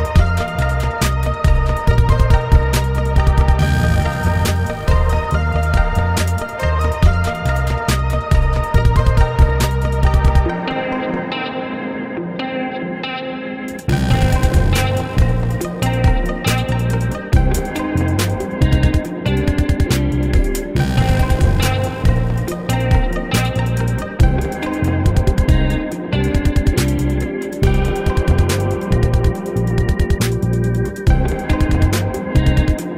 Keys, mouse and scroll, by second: 0.0 ctrl++, 0.8 right click, 0.9 ctrl+z, 2.5 ctrl++, 2.9 ctrl+z, 3.0 ctrl+z, 3.5 ctrl+-, 4.7 ctrl+z, 4.8 right click, 6.2 right click, 7.4 ctrl++, 7.8 ctrl+z, 8.0 ctrl+-, 8.1 right click, 8.5 right click, 8.7 right click, 8.9 space, 9.6 right click, 10.3 space, 12.0 right click, 12.3 space, 12.4 right click, 12.4 space, 19.2 right click, 21.3 space, 22.2 right click, 22.3 right click, 22.4 ctrl+z, 24.9 right click, 27.1 ctrl++, 28.0 right click, 28.0 space, 28.3 right click, 30.1 right click, 31.3 right click, 31.8 right click, 32.8 right click.